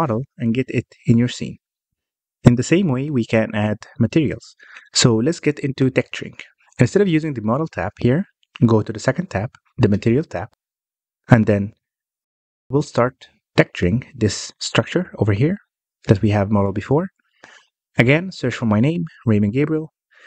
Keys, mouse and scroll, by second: 0.7-3.8 middle drag, 3.8 scroll up 1, 4.0 scroll down 1, 4.3-6.6 middle drag, 6.6 click, 8.3 alt+h, 8.9 alt+a, 9.3 scroll down 1, 10.2-10.6 scroll down 1, 10.6 click, 11.0 click, 12.1 click, 12.5 click, 16.5 click, 16.9-17.3 scroll down 1, 17.3-18.2 middle drag, 18.2 scroll down 1, 18.4-19.5 middle drag, 19.5 click.